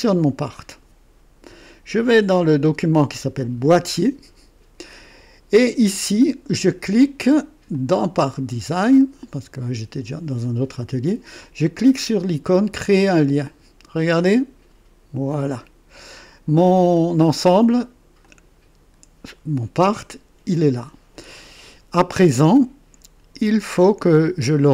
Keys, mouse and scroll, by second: 0.4 click, 3.6 click, 7.7 click, 8.9 click, 12.9 click, 18.2 click.